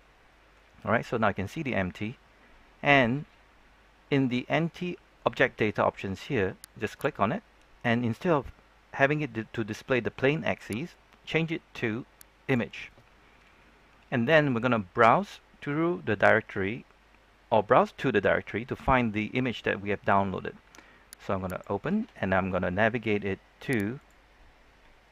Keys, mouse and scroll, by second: 5.1-12.3 drag.